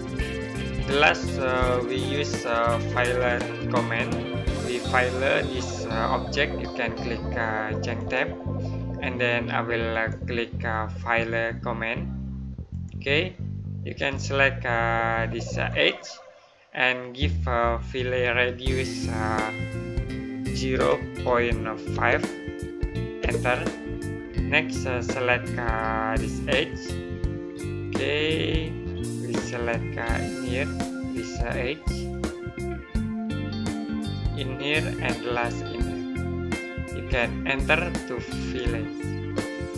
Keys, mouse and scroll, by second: 0.7 middle click, 7.8 click, 12.6 click, 15.5 click, 20.6 KP_0, 26.3 click, 30.0 click, 38.2 right click.